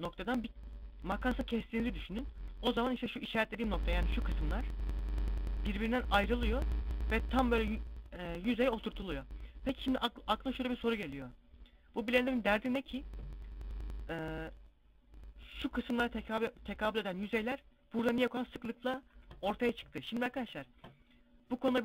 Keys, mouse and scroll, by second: 0.4 scroll down 1, 1.8 scroll up 3, 2.3-3.2 scroll down 1, 13.1 middle click.